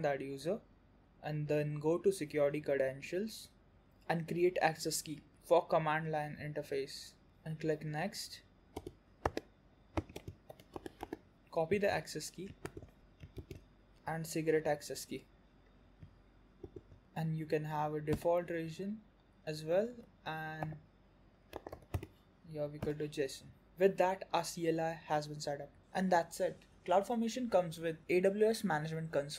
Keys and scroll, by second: 12.9 alt+q.